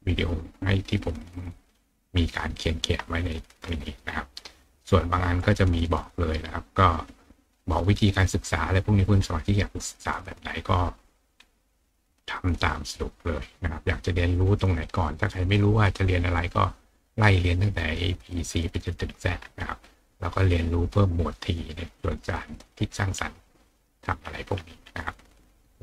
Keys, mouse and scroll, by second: 1.6 click, 2.5 click, 3.6-5.6 scroll down 5, 8.8-9.4 scroll up 4, 10.4-11.3 scroll down 2, 11.9-13.2 scroll up 3, 14.2 scroll up 2, 19.1-20.0 scroll down 4, 21.8 scroll down 2, 24.2-25.8 scroll up 2.